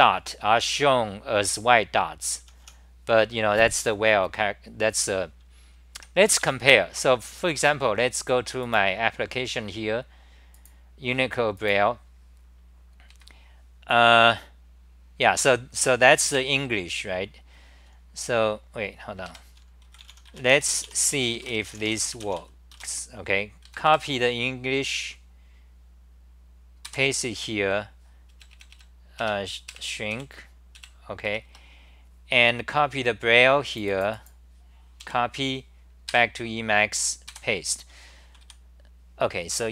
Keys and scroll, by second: 2.4 t, 2.6 t, 5.9 2, 6.4 e, 26.6-27.3 typing, 28.3 super+-, 28.5 super+-, 29.2 super+-, 29.7 super+-, 30.1 super+-, 31.2-31.9 typing, 37.3-38.9 typing.